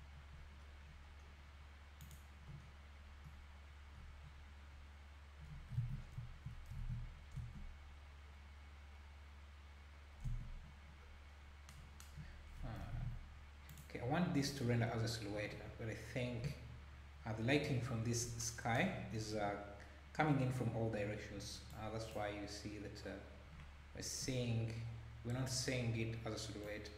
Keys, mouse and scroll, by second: 0.6 scroll up 1, 0.8-1.2 scroll down 1, 2.0 click, 2.6-3.0 scroll down 1, 4.2-4.7 scroll down 8, 5.8 alt+a, 6.0 scroll down 1, 6.8 ctrl+s, 7.3 space, 10.3 space, 11.0 scroll up 2, 12.9 ctrl+s, 13.7 click, 15.6-16.3 scroll down 4, 21.7-22.6 drag, 24.2-24.5 scroll up 1, 26.6 click.